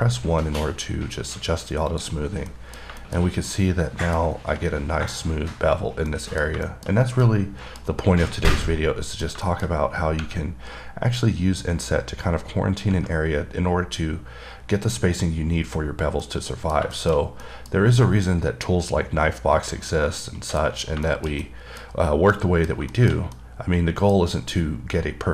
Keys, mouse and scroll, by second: 2.2 click, 2.4 scroll down 3, 2.8 middle click, 3.3 middle click, 3.7 middle click, 6.3 middle click, 6.9 middle click, 7.5 middle click, 8.9 middle click, 9.7 middle click, 16.5 middle click, 17.2 middle click, 20.5 middle click, 20.8 middle click, 21.3 middle click, 21.7 double middle click, 22.6 middle click, 23.2 middle click, 23.6 middle click, 24.4 scroll down 1.